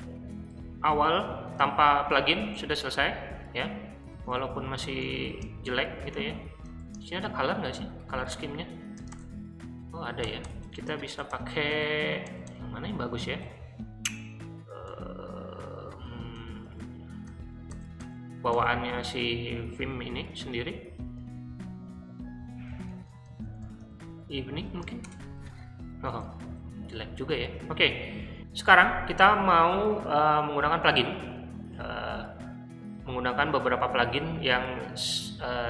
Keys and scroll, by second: 4.0-5.2 typing, 6.8-9.6 typing, 10.2 Tab, 10.8 Tab, 12.0-12.3 Tab, 13.4 Tab, 14.9 Tab, 16.6 Tab, 17.2 Tab, 17.7 Tab, 17.9 Tab, 18.5 Tab, 21.3 Tab, 22.4 shift+Tab, 26.4 w, 27.7-29.1 typing.